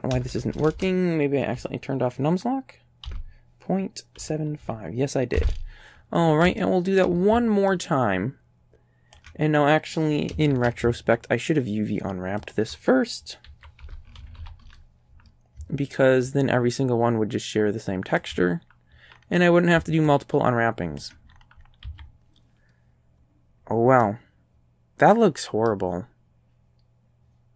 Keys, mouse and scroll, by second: 0.2 BackSpace, 0.3 BackSpace, 3.1 KP_Decimal, 4.2 KP_7, 4.6 KP_5, 5.4 KP_Enter, 6.6 shift+right click, 6.8 shift+click, 7.8-9.4 ctrl+drag, 10.5 shift+d, 12.5 ctrl+click, 13.5 s, 13.8 KP_Decimal, 14.2 KP_7, 14.4 KP_5, 14.7 KP_Enter, 16.3-18.4 ctrl+drag, 18.8-19.2 ctrl+scroll down 4, 19.2 scroll up 1, 20.1-21.2 ctrl+drag, 21.3 ctrl+scroll up 1, 21.9 a, 24.0-25.9 drag.